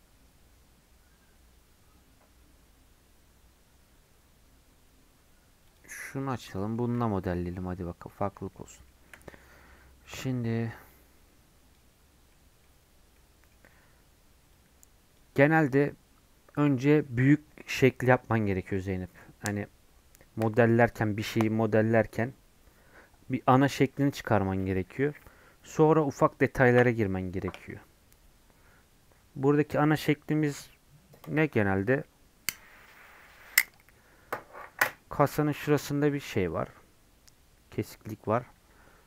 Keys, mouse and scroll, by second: 6.3 middle click, 6.7-7.3 scroll up 2, 7.3 middle click, 7.5 scroll down 1, 7.6 middle click, 8.2 scroll up 1, 8.3-39.0 middle drag.